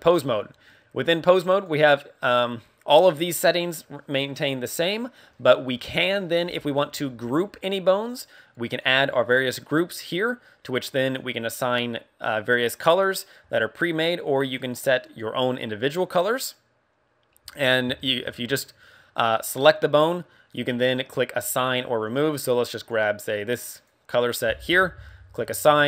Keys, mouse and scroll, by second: 1.4 click, 6.0 right click, 6.7 right click, 8.7 click, 9.3 click, 9.8 click, 11.0 click, 14.5 click, 16.4 click, 18.0 shift+middle click, 18.4 scroll up 3, 19.5 right click, 23.7 click.